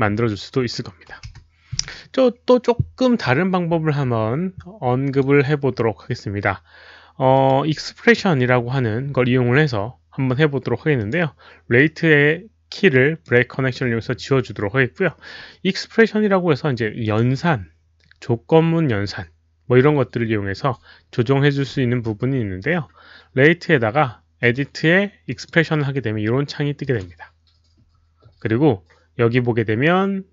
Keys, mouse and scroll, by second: 1.1 KP_1, 1.2 Return, 5.1 click, 6.2 Return, 6.2 click, 6.2 KP_1, 7.3 Return, 7.3 click, 7.3 KP_1, 10.9 click, 11.1 Return, 11.1 KP_1, 11.8-13.2 right drag, 15.9 right click, 15.9 click, 17.0 click, 21.9 right click, 24.4 click, 25.2 click, 26.8 click, 27.8 click.